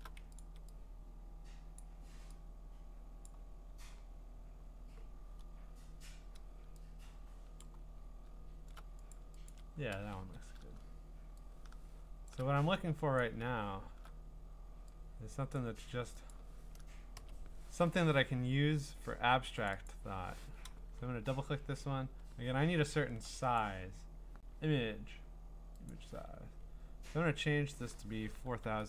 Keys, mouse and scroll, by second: 0.4 ctrl+click, 1.8 click, 3.3 click, 4.4 click, 5.1-6.6 drag, 7.6 click, 8.0 middle click, 8.0-8.5 scroll, 9.1 click, 9.5 ctrl+click, 10.2 ctrl+t, 12.3 shift+click, 13.2 click, 13.5 scroll down 3, 13.6-14.0 scroll, 15.6 click, 16.3 click, 17.2 Return, 19.7 click, 19.9 click, 20.8-23.6 scroll, 23.6 click, 25.9 click, 28.3-28.8 typing.